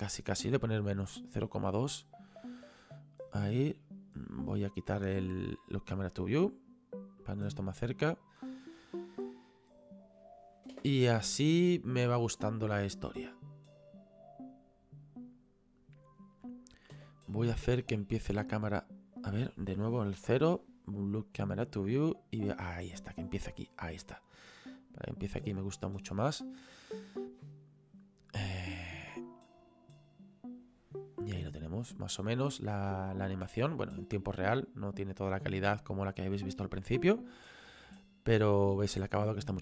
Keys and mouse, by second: 1.3 click, 5.7 click, 8.4 click, 10.7 space, 16.9 space, 17.6 click, 20.2 KP_0, 21.2 click, 21.6 middle click, 24.6 middle click, 29.1 space.